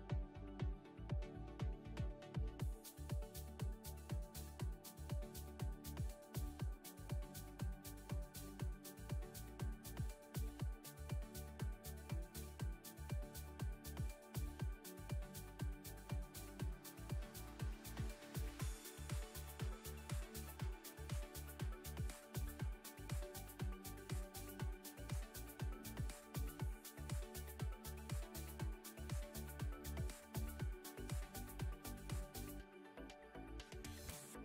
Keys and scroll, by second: 2.1 Tab, 4.0 3, 9.3 x, 13.5 Tab, 14.3 Tab, 15.9 2, 18.5 s, 24.2 s, 27.9 Tab.